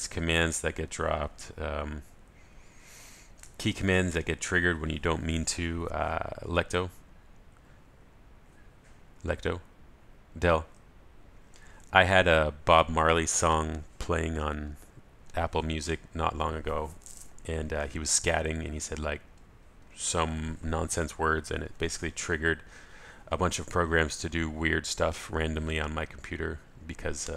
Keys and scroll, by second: 9.9 ctrl+alt+shift+super+a.